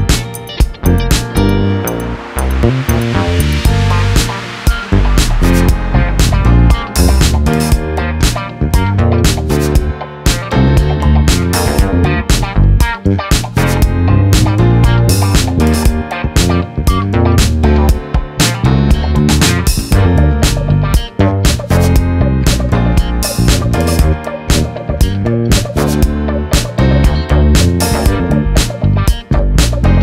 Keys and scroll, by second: 5.5 ctrl+t, 8.1 ctrl+z, 8.6 Return, 10.4 c, 11.7 Return, 12.3 m, 17.3 ctrl+z, 20.2 ctrl+v, 23.1-24.7 typing, 24.8 Return, 28.3 ctrl+-.